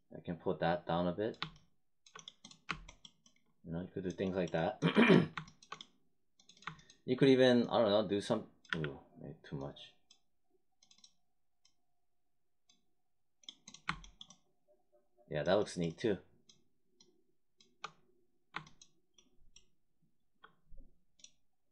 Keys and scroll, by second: 8.6 z.